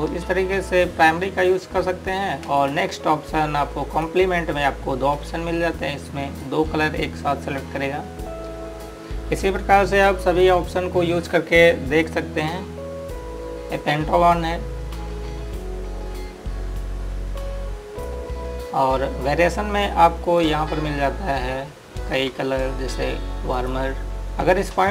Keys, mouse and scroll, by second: 24.1 click.